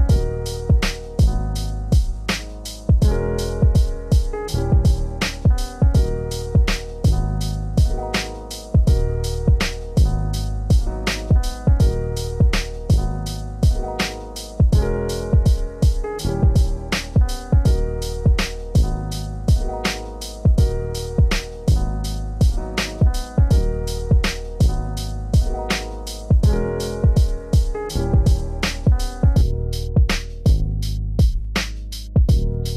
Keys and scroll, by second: 9.1 ctrl+z, 25.9 ctrl+space, 31.1 ctrl+space.